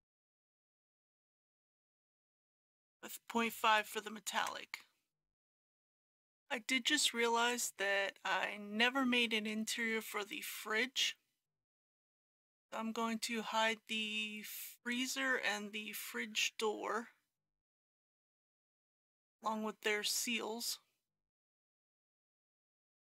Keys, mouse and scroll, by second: 2.5 click, 3.5 KP_Decimal, 3.7 KP_5, 6.0 click, 9.2 scroll up 1, 11.9-14.8 scroll down 1, 14.8-15.8 drag.